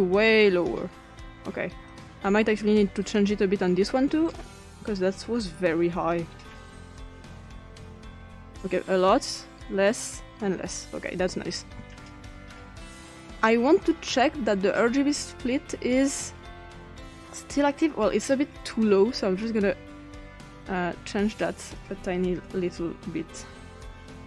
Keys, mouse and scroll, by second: 0.2 click, 1.9 click, 3.0 click, 4.4 click, 5.2 click, 6.1-11.9 drag, 16.0 click, 19.6 scroll down 2, 21.4 click, 22.1 click, 22.3 7, 23.3 Return.